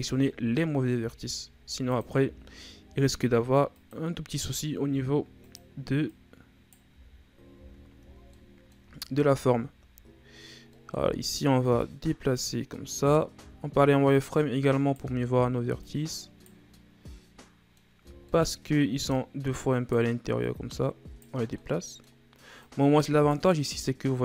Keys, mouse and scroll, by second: 0.2 middle click, 0.9 s, 4.3 s, 6.1 right click, 6.9 z, 7.5 z, 7.7-8.3 scroll down 3, 8.3 middle click, 9.0-10.0 scroll down 2, 10.0-10.7 scroll up 2, 10.7 middle click, 11.0-11.6 scroll up 1, 11.6 right click, 13.4 z, 14.0 right click, 15.0 z, 15.8 right click, 16.7-18.1 middle drag, 18.1 shift+scroll down 2, 18.2 middle click, 19.1 right click, 20.4 right click, 21.6-22.6 middle drag, 22.6 right click, 23.6-24.2 middle drag.